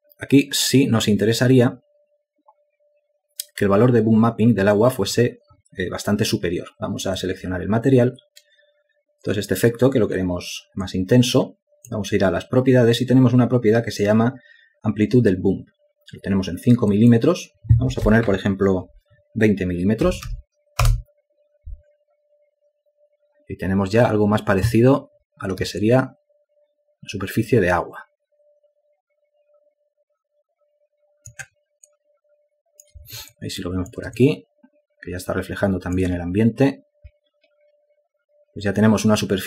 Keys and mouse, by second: 26.6 alt+click, 32.7 alt+click, 34.1 ctrl+alt+click, 35.0 alt+shift+click.